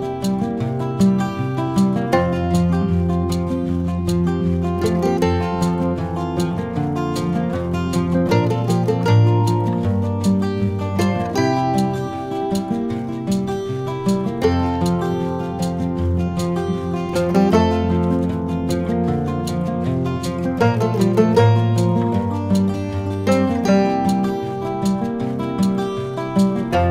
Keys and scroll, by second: 2.9 v, 5.5 super+c, 5.8 super+v, 8.5 Return.